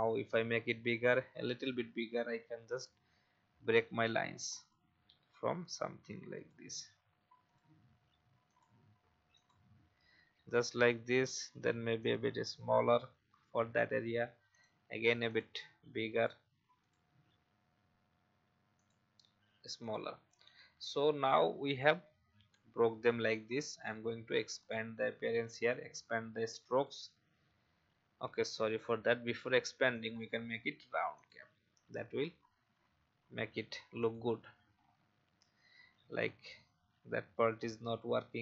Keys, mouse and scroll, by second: 2.7-15.2 drag, 21.2 v, 24.5-26.7 drag, 28.3 ctrl+z, 29.9 click, 36.1 alt+scroll down 1, 37.6-38.3 alt+scroll down 1.